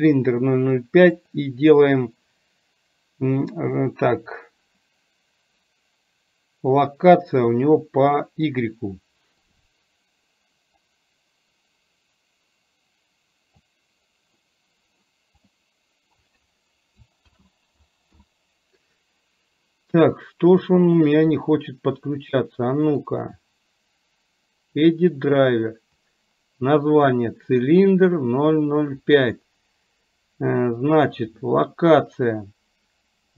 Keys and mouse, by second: 9.4 click, 11.2-13.8 drag, 15.5 click, 17.4 ctrl+z, 21.1 click.